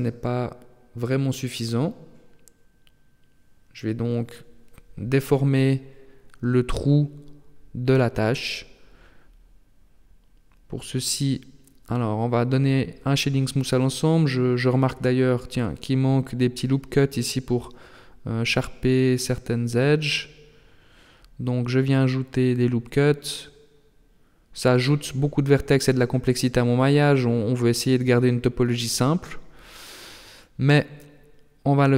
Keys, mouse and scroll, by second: 0.6 right click, 2.9 click, 6.0 middle click, 11.4 Tab, 12.8 click, 13.6 middle click, 14.8 Tab, 16.0 middle click, 18.8 click, 20.3 ctrl+r, 23.1 ctrl+r, 25.0 middle click, 26.4 scroll up 2, 27.0 right click, 28.2 ctrl+l, 29.0 h, 30.4 right click, 30.7 shift+right click, 31.4 shift+right click, 31.8 right click.